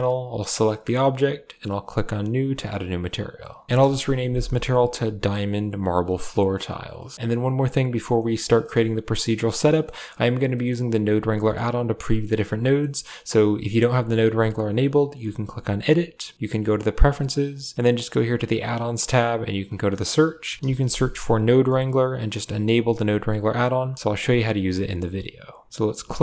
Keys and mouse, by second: 0.2 right click, 1.8 click, 3.2 click, 6.9 middle click, 7.1 KP_Decimal, 7.1 a, 7.2 click, 8.0 middle click, 8.5 middle click, 9.2 click, 9.6 middle click, 10.4 middle click, 12.0 middle click, 12.5 middle click, 15.6-16.9 drag.